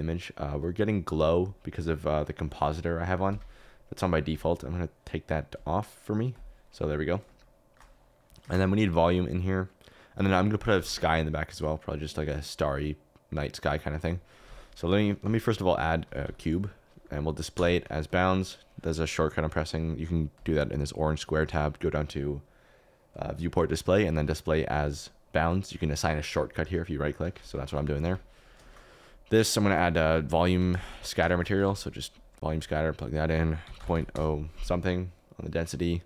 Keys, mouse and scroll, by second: 8.4 shift+a, 10.7 shift+a, 14.4 s, 15.2 s, 16.0 g, 16.2 y, 17.5 d, 24.5 click, 26.4 click, 27.6-29.0 typing, 28.6 shift+middle click, 28.7 click, 29.5 click, 30.4 click, 30.6-31.3 typing, 32.5 alt+right click, 33.2 click.